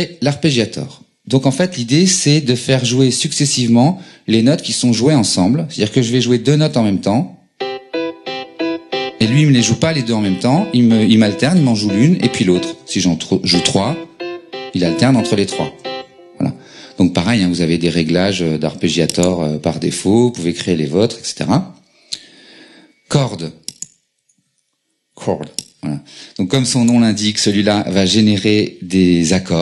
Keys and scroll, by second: 7.0-7.7 typing, 12.8-13.9 typing, 15.8 typing, 24.2 BackSpace.